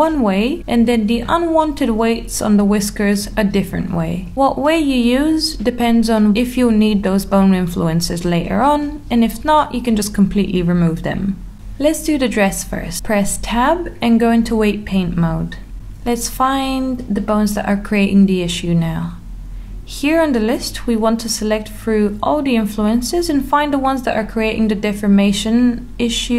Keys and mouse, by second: 0.0 middle click, 1.2 click, 1.6 click, 2.2 click, 2.7 click, 3.2 click, 3.6 click, 4.0 click, 5.3-6.5 middle drag, 6.9-8.0 middle drag, 8.7 middle click, 13.3 click, 13.7 Tab, 17.2 click, 18.2 click, 18.8 click, 20.0 click, 20.4 click, 20.9 click, 21.9 click, 22.9 click, 23.5 click, 24.6 click, 25.0 click, 25.6 click.